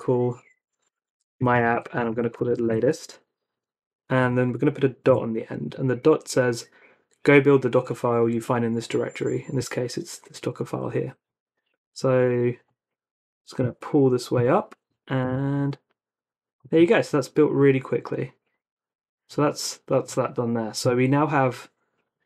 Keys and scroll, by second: 0.0-5.1 typing, 15.2 Return.